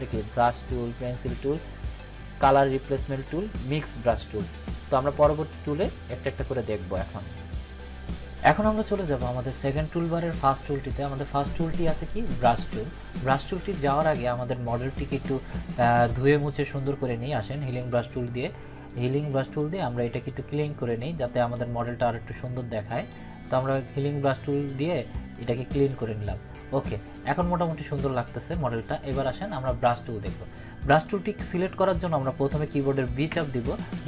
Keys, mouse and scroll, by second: 7.5 click, 11.1-12.1 drag, 16.4-17.0 drag, 33.3 b.